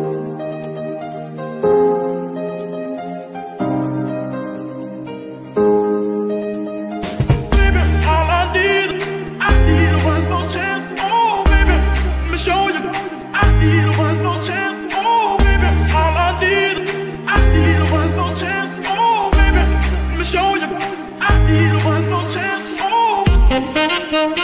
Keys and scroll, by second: 15.0 r, 15.2 x, 17.0 Escape, 17.8 KP_Decimal, 19.3 r, 20.8 Escape, 22.1 g, 22.2 y.